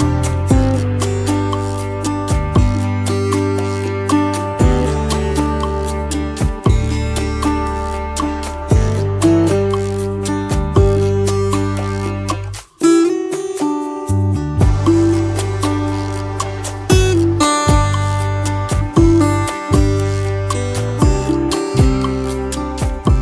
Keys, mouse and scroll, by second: 3.1 alt+scroll down 1, 3.4 space, 3.8 scroll down 2, 4.1 space, 5.2 alt+scroll, 5.6 space, 6.0 double click, 6.1 space, 6.7 alt+scroll, 13.7 right click, 14.9 double click, 20.2-21.0 scroll down 1, 21.0 scroll up 1.